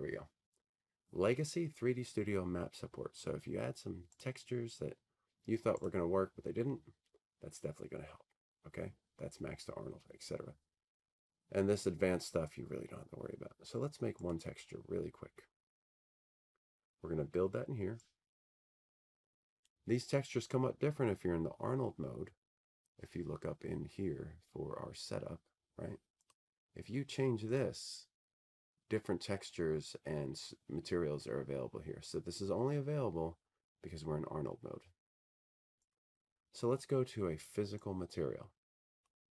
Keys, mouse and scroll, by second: 0.9 click, 6.2-12.5 drag, 16.3 click, 17.5 click, 21.6 click, 28.4 click, 29.6 click, 38.0 click.